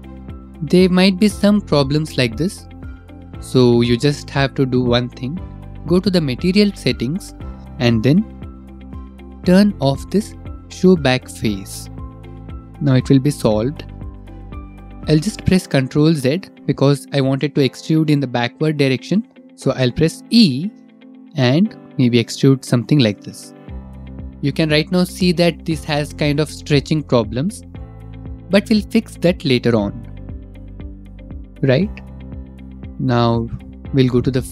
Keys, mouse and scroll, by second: 0.1 click, 0.5 middle click, 0.9 click, 2.8 middle click, 4.0 middle click, 5.1 middle click, 5.8 middle click, 7.1 click, 7.6 click, 7.6 middle click, 7.8 click, 8.7 middle click, 9.4 middle click, 10.0 middle click, 12.0 scroll, 12.0 click, 15.5-15.8 scroll, 15.8 click, 16.4 middle click, 17.2 ctrl+z, 17.9 ctrl+z, 18.6 middle click, 22.1 e, 24.6 click, 25.9 middle click, 26.2 middle click, 26.6 middle click, 28.0 middle click, 29.5-29.9 scroll, 29.9 middle click, 30.2 middle click, 31.5 middle click, 32.2 middle click, 32.5 click, 32.8 middle click, 33.7 click.